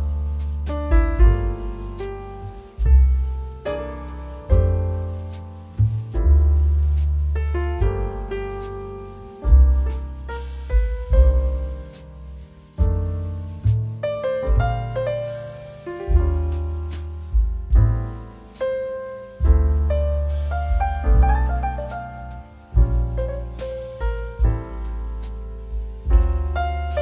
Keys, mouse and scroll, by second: 1.1 ctrl+t, 1.7 shift+click, 3.0 ctrl+z, 3.8 d, 6.1 ctrl+r, 6.5 ctrl+t, 7.4 alt+click, 9.4 ctrl+e, 9.8 z, 10.1 click, 10.8 space, 11.0 click, 11.7 click, 11.8 space, 12.1 click, 12.3 space, 14.0 click, 19.6 space, 19.8 click, 20.1 space, 22.2 right click, 22.9 click, 23.4 space, 23.7 click, 23.9 space, 25.9 click.